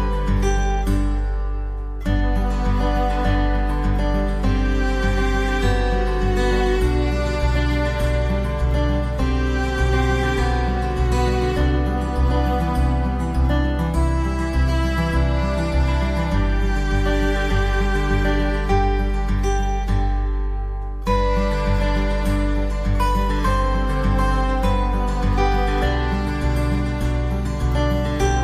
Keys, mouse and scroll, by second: 2.4 click, 6.5 right click, 9.7 click, 11.4 click, 19.4 click, 25.9-28.4 drag.